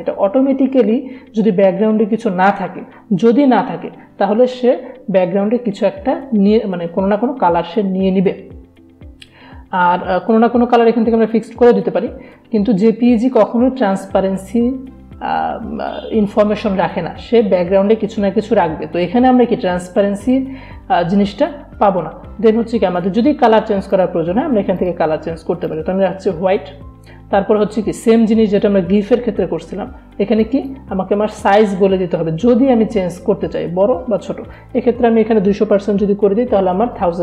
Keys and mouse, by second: 22.9 click, 23.0 click, 30.5 click, 34.6 click, 37.0 click.